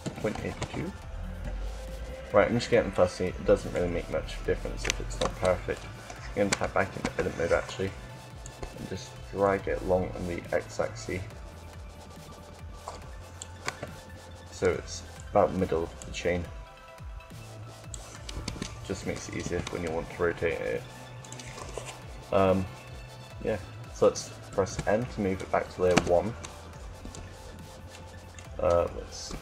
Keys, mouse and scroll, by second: 2.8-5.1 middle drag, 5.1 Tab, 6.4 a, 7.1 a, 8.3-9.9 drag, 13.4 KP_7, 15.7-17.5 drag, 18.2 Tab, 19.4 r, 21.6-24.1 middle drag, 24.1 m, 26.9 1, 27.8 1, 29.0 s.